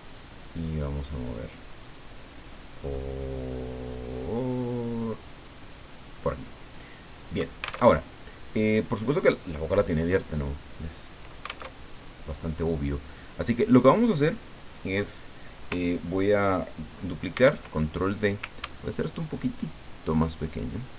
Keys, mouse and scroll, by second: 0.1-6.5 drag, 7.0 click, 7.9 alt+Tab, 11.7 alt+Tab, 17.3 ctrl+d, 19.2-20.9 ctrl+shift+drag.